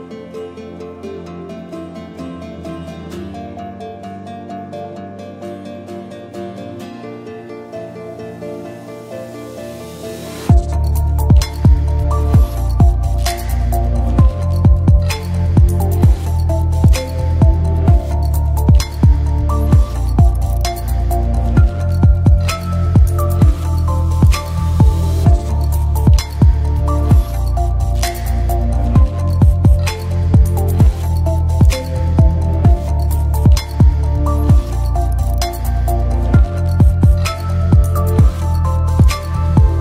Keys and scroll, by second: 32.4 space, 34.5-36.0 typing, 38.6-39.8 typing.